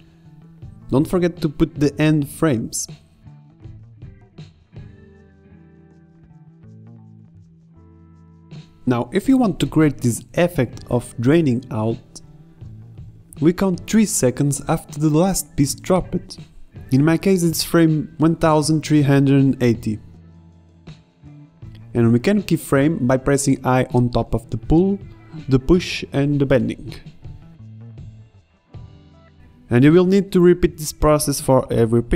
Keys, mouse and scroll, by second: 0.6 KP_0, 1.2 KP_0, 2.5-5.7 typing, 4.6 click, 4.7 click, 6.2 click, 17.9 KP_0, 22.8-24.4 drag, 26.6-27.0 drag, 30.0-30.7 i, 30.9 i, 31.8-32.1 i.